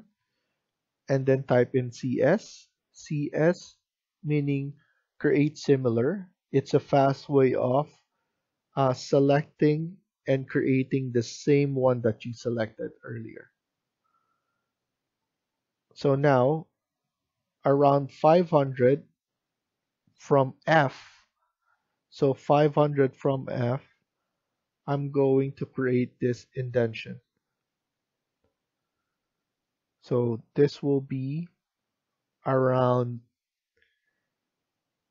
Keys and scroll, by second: 1.6-2.6 typing.